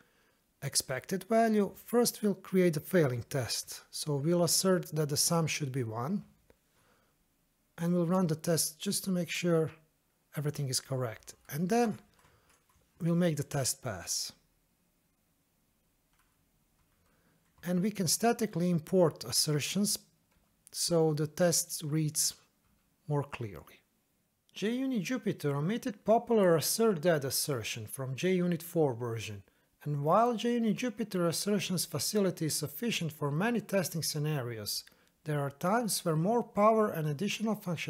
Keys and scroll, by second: 4.7 Escape, 6.8 ctrl+shift+F10, 12.3 ctrl+s, 13.5 ctrl+shift+F10, 17.7 alt+Return.